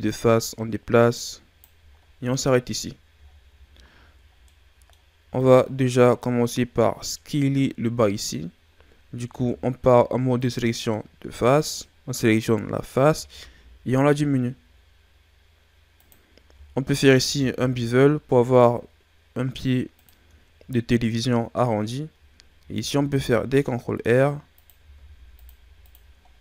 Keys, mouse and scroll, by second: 0.0 click, 1.9-3.2 ctrl+scroll up 8, 3.2 shift+scroll down 7, 4.0-4.4 ctrl+scroll up 1, 4.4 middle click, 5.3 right click, 9.2 ctrl+Tab, 11.5 right click, 12.4-13.1 scroll up 1, 13.1 s, 17.1 ctrl+b, 20.3-20.8 ctrl+scroll up 1, 21.0-22.5 scroll up 1, 22.5 ctrl+r, 24.9 ctrl+r, 26.2 scroll down 1.